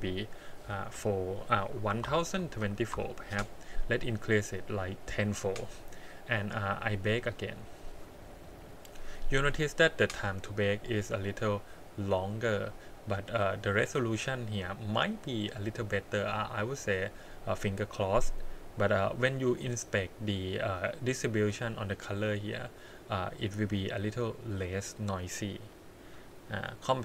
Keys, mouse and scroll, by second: 6.6 click, 7.2 click, 12.6-13.0 scroll up 5, 13.2 middle click, 14.5 scroll down 2, 15.5-15.9 scroll down 2, 16.0 middle click, 16.5 scroll up 2, 18.6-19.6 scroll up 5, 20.2-22.5 scroll down 3, 26.0-26.9 scroll down 1, 26.9-27.0 scroll down 6.